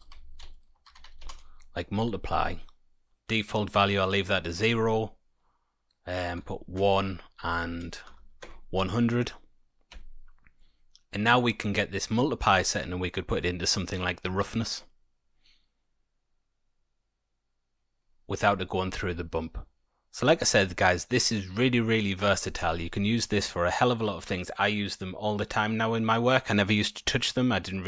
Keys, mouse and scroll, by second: 4.6 click, 7.5 click, 8.1 KP_0, 9.9 Tab, 10.5 middle click, 12.0 click, 19.2-21.5 scroll down 1, 21.5-22.3 scroll down 2.